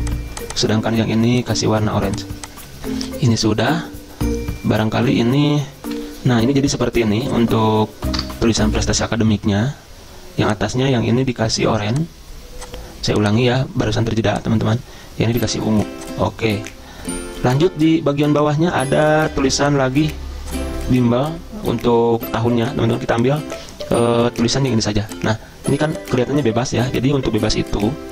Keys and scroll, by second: 5.9 F10, 8.2 BackSpace.